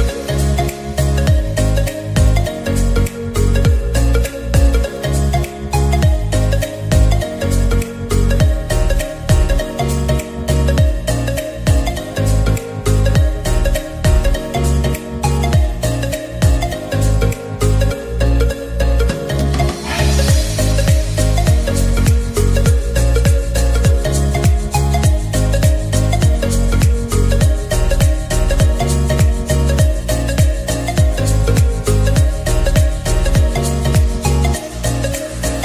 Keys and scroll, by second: 8.3 0, 9.9 typing.